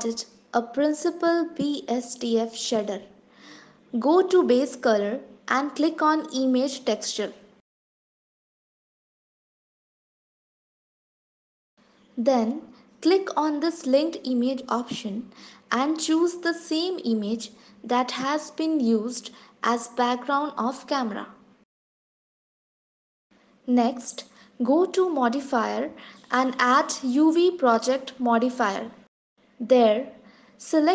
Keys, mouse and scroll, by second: 0.1-0.5 scroll down 3, 4.9 click, 14.6 click, 25.8 click.